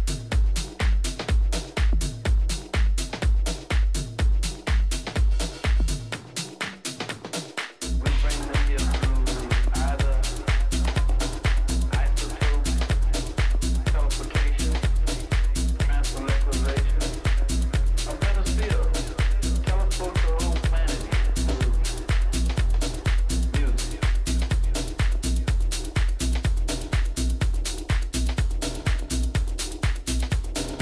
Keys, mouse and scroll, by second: 0.0-1.5 drag, 2.4-3.5 right drag, 3.5-5.3 middle drag, 9.8-11.6 drag, 10.8-13.6 middle drag, 13.2 Tab, 15.6-18.9 middle drag, 18.9 a, 20.5-22.4 drag, 22.1-23.6 right drag, 22.7 click, 23.6-26.6 middle drag, 26.6 Delete, 28.0 middle click, 29.2 a, 30.0 a, 30.6-30.8 right drag.